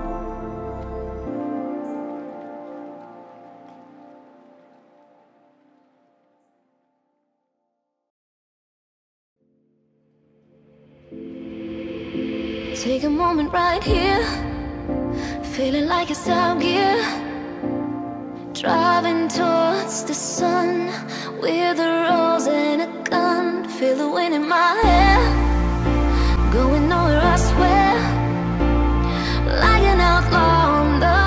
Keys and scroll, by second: 26.3 ctrl+0.